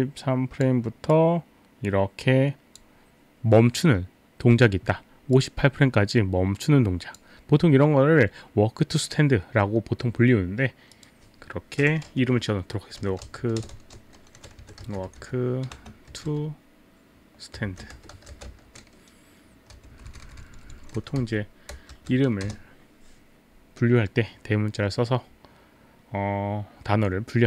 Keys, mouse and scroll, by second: 1.2 click, 5.3 click, 10.9 click, 12.7-16.3 typing, 17.4-18.9 typing, 20.0 Left, 20.3 click, 20.7 Left, 21.3 Delete, 21.9 shift+t, 22.5 Return, 22.5 shift+t.